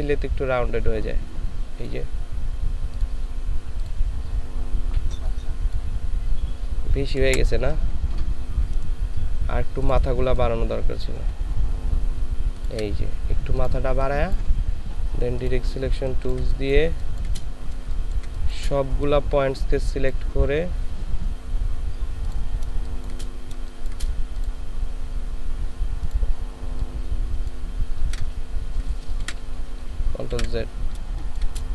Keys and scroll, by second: 7.3 Delete, 15.8 ctrl+space, 16.8 ctrl+space, 18.1 typing, 22.7 ctrl+space, 23.6 ctrl+space, 29.2 ctrl+z, 30.3 ctrl+z, 31.1 ctrl+space.